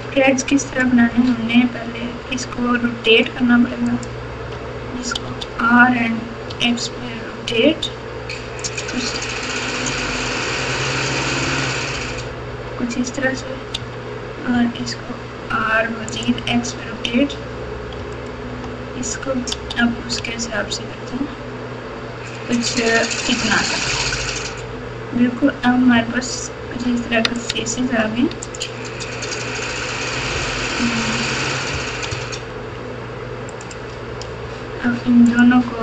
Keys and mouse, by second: 3.9 alt+click, 5.2 r, 10.4 click, 11.9 alt+click, 13.7 r, 18.1 alt+click, 19.5 r, 25.9 3, 27.3 click, 28.4 shift+click, 30.7 KP_4, 33.4 alt+click, 35.2 alt+shift+click.